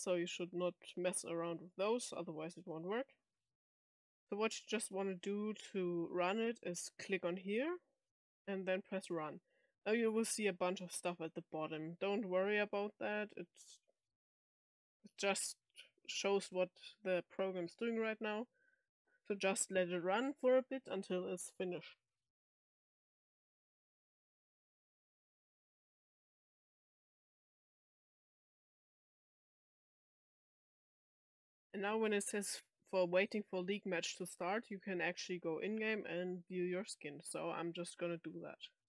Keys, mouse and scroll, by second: 1.4 click, 2.7 click, 6.9 click, 8.8 click, 38.8 click.